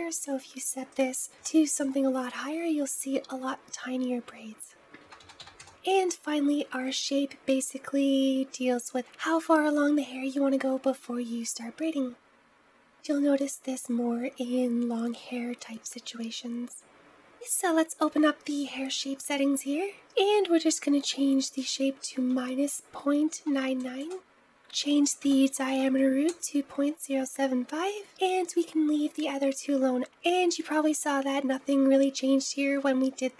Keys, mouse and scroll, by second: 0.7-2.9 drag, 4.7 click, 5.6-6.5 scroll down 2, 6.5-8.9 scroll down 1, 16.9-17.8 scroll up 1, 17.8-18.6 drag, 18.6-19.9 scroll down 2, 19.9-23.3 drag, 23.3 KP_9, 24.4-27.2 drag.